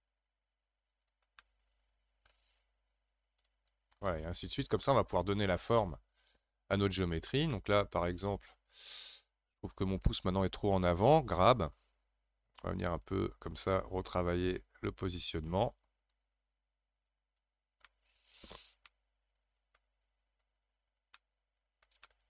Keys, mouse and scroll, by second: 1.4-3.5 middle drag, 3.5-4.5 drag, 4.5-4.9 scroll down 3, 4.9-7.0 middle drag, 7.0-7.5 scroll down 4, 7.5-10.2 middle drag, 10.2-11.5 scroll up 4, 11.5 g, 11.9-12.5 scroll up 3, 12.5-17.9 drag, 17.9-20.4 middle drag, 20.4 click, 21.1-22.2 middle drag.